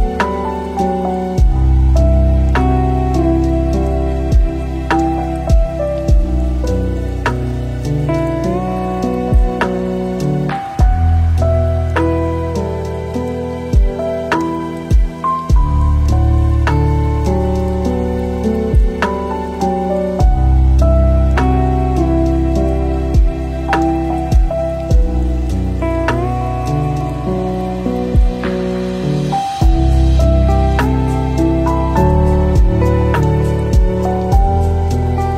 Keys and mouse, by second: 5.6 click, 7.2 click, 8.2-8.8 drag, 10.3-14.1 middle drag, 14.4-17.3 shift+drag, 17.6 click, 17.7 middle click, 19.2-20.7 shift+drag, 20.8-24.9 shift+drag, 26.1-27.8 shift+drag, 28.0 middle click, 28.9 middle click, 29.5 shift+middle click, 30.4 s, 31.4 click, 31.7 middle click, 32.8 shift+middle click, 33.5-33.9 middle drag, 34.0 click, 35.1-35.3 drag.